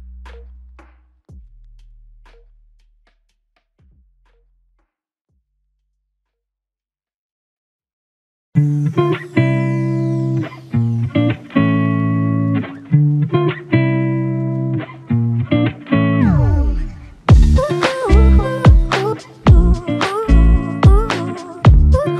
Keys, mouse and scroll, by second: 3.5 alt+click, 6.7 double click, 8.8 alt+click, 12.0 alt+click, 16.5 double click, 20.8 alt+click.